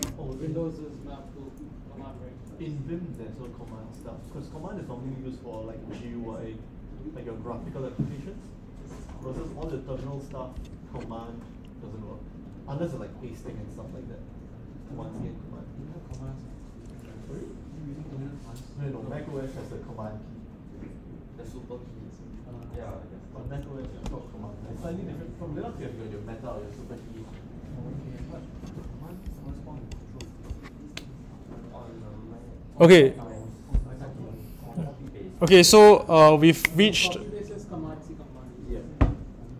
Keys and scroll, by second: 23.4 Down, 23.4 Up.